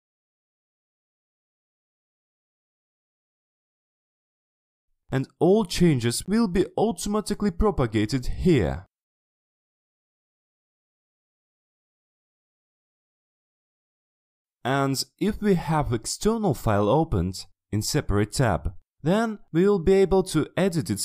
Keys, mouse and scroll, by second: 0.1 click, 0.8 click, 1.3 click, 1.6 middle click, 2.1 click, 2.3 click, 2.7 click, 3.1 click, 3.5 ctrl+scroll down 2, 3.8 click, 4.1 click, 6.1 click, 7.3-7.6 ctrl+scroll down 2, 8.8 click, 9.4 click, 11.6 click, 12.3 middle click, 12.7 ctrl+scroll up 2, 12.9 ctrl+middle click, 12.9 scroll down 3, 13.2-13.7 ctrl+scroll up 4, 14.6 click, 14.9-18.6 scroll down 2, 18.6 click, 19.9 click.